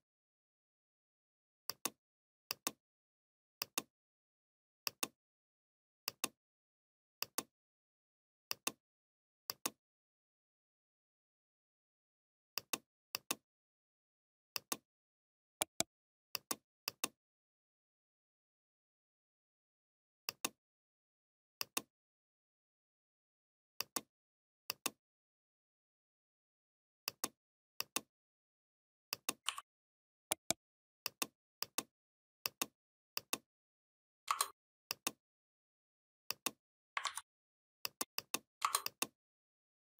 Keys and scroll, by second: 36.9 ctrl+z.